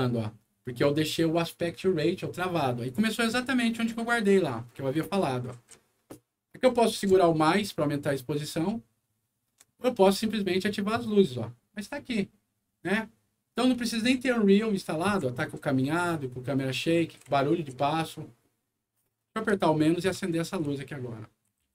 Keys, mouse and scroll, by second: 10.1 w, 16.8 a, 19.4 -, 20.1 a, 21.6 f.